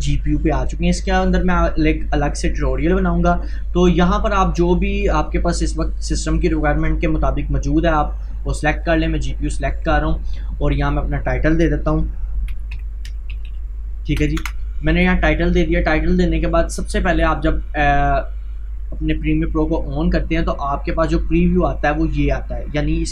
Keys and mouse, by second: 8.7 click, 12.6 c, 14.4 Return, 19.1 click.